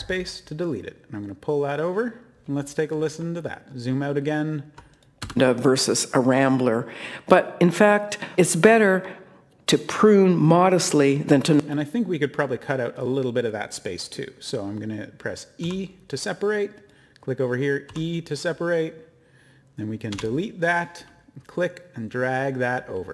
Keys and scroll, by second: 5.2 e, 20.1 BackSpace.